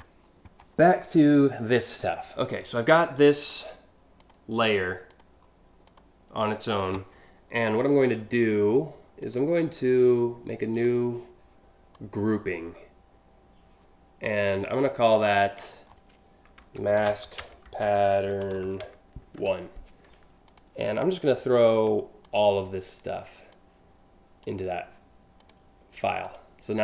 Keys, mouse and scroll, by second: 3.1 click, 3.8 click, 4.7 click, 5.5 click, 8.0 click, 8.8 click, 10.3 click, 11.6-13.8 drag, 14.7 click, 16.3-19.0 typing, 20.1 click, 20.8 click, 21.8 shift+click, 23.1 click, 25.0 click, 25.9 click.